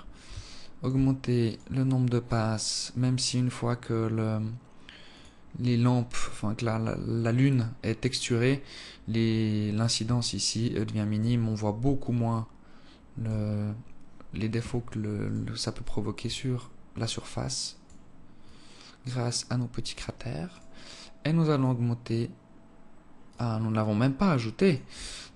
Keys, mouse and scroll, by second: 0.8 alt+shift+click, 1.9 right click, 2.7-3.8 scroll down 17, 4.2-4.7 scroll up 2, 5.0 scroll up 6, 5.5 click, 10.5 shift+click, 12.3 shift+click, 15.6 right click, 16.7 shift+click, 18.8 shift+click, 20.8 right click, 21.9 click, 23.6 click.